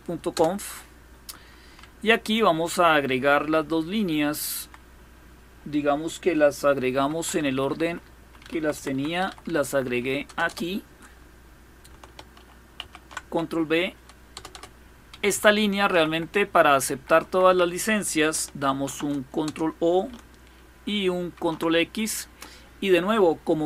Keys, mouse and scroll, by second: 0.0 Return, 1.4 Down, 2.1 Down, 6.6 Up, 6.8 Up, 7.0 Up, 7.5 Up, 7.7 Up, 7.8 Up, 8.0 Up, 8.2 Up, 8.4 Up, 8.6 Up, 8.7 Up, 8.9 Up, 9.1 Up, 9.5 Up, 9.9 Return, 10.1 Return, 12.4 ctrl+v, 14.0 Return, 14.2 Return, 14.8 Up, 14.9 Up, 15.6 Right, 15.8 Right, 15.9 Right, 16.1 Right, 16.2 Right, 16.4 Right, 16.6 Right, 16.7 Right, 16.9 Right, 17.1 Right, 18.4 ctrl+o, 19.1 Return, 21.0 ctrl+x.